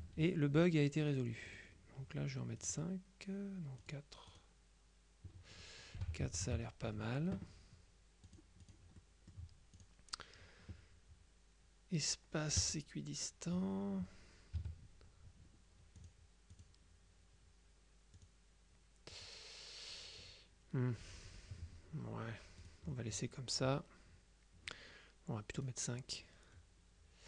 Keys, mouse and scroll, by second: 1.6 click, 2.7 click, 3.9 click, 6.3 KP_Subtract, 8.3-9.3 drag, 9.1 right click, 9.8 click, 12.7 click, 14.7 F2, 16.1 click, 18.3 click, 19.2 click, 22.7 click, 25.7 click.